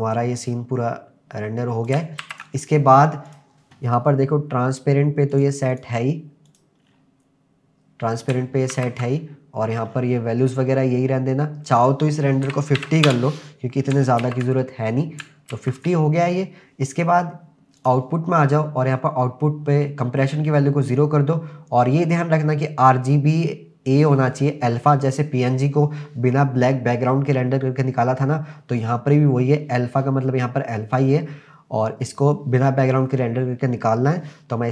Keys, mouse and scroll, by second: 2.2 ctrl+s, 3.3 click, 4.1-5.2 scroll down 2, 5.2 scroll down 1, 5.3 click, 5.7 click, 6.5 click, 6.8-7.3 scroll down 2, 8.8 ctrl+s, 9.9-10.6 scroll up 3, 11.7-13.1 drag, 14.2 ctrl+s, 14.9-15.2 scroll up 3, 15.6 ctrl+s, 17.8 click, 20.3-21.0 drag, 21.6-23.4 scroll down 2.